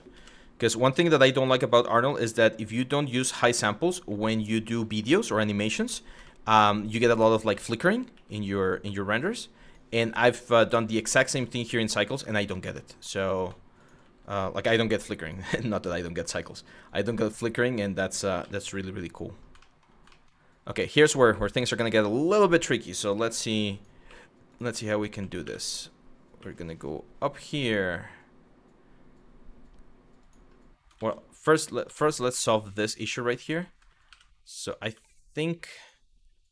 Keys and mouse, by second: 0.8 click, 1.4 shift+click, 1.8 f, 3.0 f, 3.5 click, 4.8 click, 5.9 shift+middle click, 6.5 click, 6.9 shift+click, 7.1 f, 7.8 f, 8.3 click, 8.8 shift+click, 9.3 click, 10.3 f, 10.8 click, 11.4 click, 12.4 middle click, 12.9 click, 13.4 click, 14.3 1, 14.7 click, 15.5 g, 16.0 click, 16.5 click, 17.0 g, 18.0 z, 18.7 click, 19.3 shift+middle click, 19.8 shift+middle click, 22.7 click, 23.0 e, 23.4 click, 23.7 e, 25.1 2, 25.3 click, 26.0 e, 29.8 click, 30.6 ctrl+z, 31.5 ctrl+z, 31.9 shift+middle click, 33.0 click, 33.7 1, 34.3 click, 34.9 click, 35.4 click.